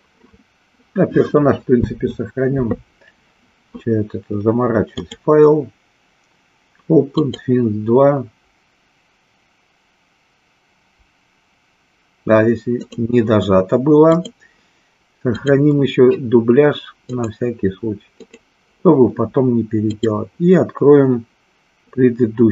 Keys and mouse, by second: 5.0-12.9 drag, 14.1-15.7 drag, 19.9-22.5 drag.